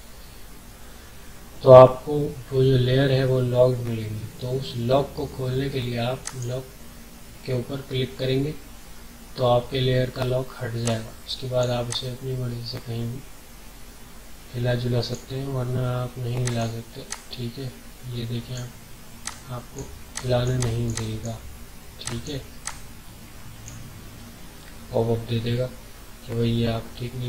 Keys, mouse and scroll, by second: 6.2 click, 10.8-26.2 drag.